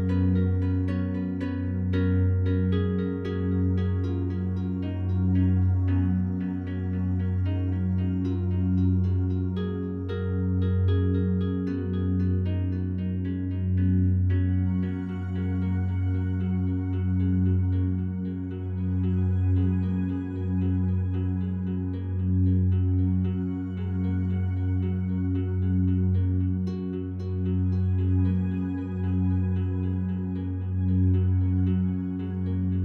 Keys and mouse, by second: 1.2-2.8 drag, 4.0-5.0 drag, 5.3 click, 5.8 click, 6.4 click, 6.9 click, 7.4 click, 7.9 click, 8.5 click, 8.9 click, 9.3 f, 10.1 click, 10.7 click, 11.5 click, 12.0 click, 12.4 click, 13.2 click, 13.5 click, 13.8 click, 14.1 click, 14.3 click, 14.6 click, 14.9 click, 15.1 click, 15.3 click, 15.6 click, 15.8 click, 16.0 click, 16.6 ctrl+alt+click, 17.1 ctrl+alt+click, 18.6 alt+shift+click, 19.3 ctrl+alt+click, 20.9 ctrl+z, 21.1 ctrl+z, 21.5 ctrl+z, 21.8 ctrl+z, 21.9 ctrl+z, 22.1 ctrl+z, 22.4 ctrl+z, 22.6 ctrl+z, 22.8 ctrl+z, 23.0 ctrl+z, 23.4 ctrl+z, 23.5 ctrl+z, 24.1 ctrl+z, 24.5 ctrl+z, 25.0 ctrl+z, 25.4 ctrl+z, 25.7 ctrl+z, 26.1 ctrl+z, 26.5 ctrl+z, 27.0 ctrl+z, 27.6 alt+shift+click, 28.2 ctrl+alt+click, 31.3 f, 31.7 click, 32.2-32.8 drag.